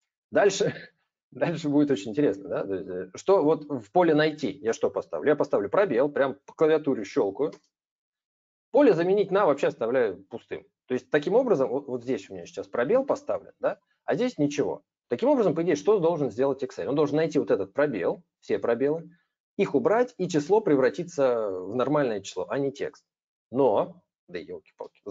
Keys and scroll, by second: 25.0 ctrl+h.